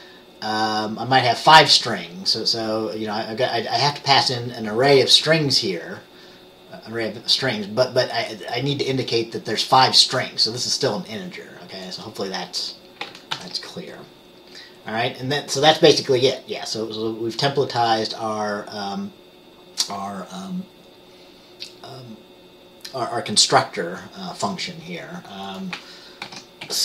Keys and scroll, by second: 13.4 ctrl+s, 26.4 ctrl+x, 26.7 ctrl+x.